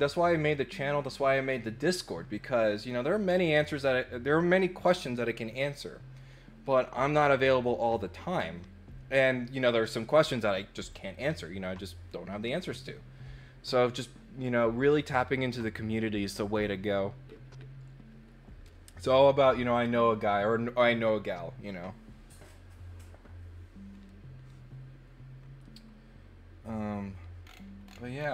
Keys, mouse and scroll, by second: 27.4-28.2 scroll down 3.